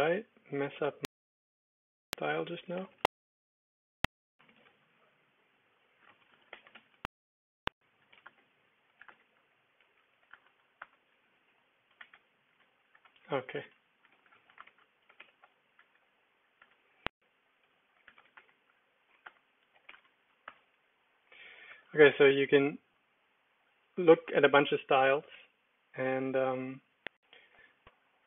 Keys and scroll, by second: 2.4-12.7 typing, 13.0 Escape, 13.5 Up, 14.2 Escape, 14.3 ctrl+c, 14.6 ctrl+r, 14.8-16.6 typing, 16.6 Return, 17.7-20.3 typing, 20.4 Return, 22.0 Down, 23.4 Down, 23.7 Up, 24.2 Up, 27.0 Down, 27.5 Return.